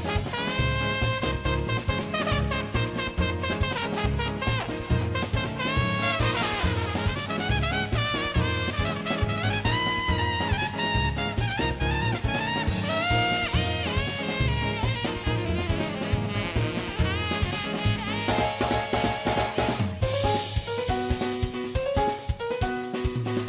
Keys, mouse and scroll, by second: 3.1 alt+g, 3.1 alt+click, 4.2-8.3 alt+right drag, 8.3 middle click, 8.5 middle click, 8.7 shift+right click, 8.7 middle click, 9.5 middle click, 9.7 middle click, 9.7 1, 9.9 middle click, 10.4 g, 10.4 middle click, 10.6 middle click, 10.8 middle click, 11.0 middle click, 11.0 g, 11.2 middle click, 11.4 g, 11.4 middle click, 12.3 middle click, 12.6 middle click, 12.8 middle click, 13.0 middle click, 13.1 right click, 13.3 middle click, 13.5 middle click, 13.9 middle click, 14.2 shift+middle click, 14.2 a, 14.3 shift+middle click, 14.3 a, 14.4 KP_1, 14.5 shift+middle click, 17.8-23.4 shift+drag, 23.4 Tab, 23.4 right click.